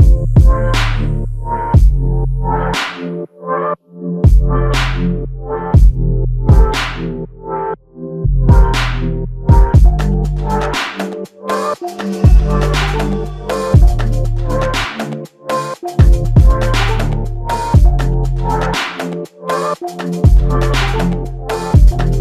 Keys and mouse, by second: 2.6 double click, 5.0 shift+click, 6.0 shift+click, 7.2 shift+click, 9.4 shift+double click, 9.6 shift+click, 10.2 alt+click, 11.3 alt+click, 11.6 ctrl+i, 13.8 f, 15.1 double click, 18.5 click, 18.6 alt+click, 21.3 alt+m.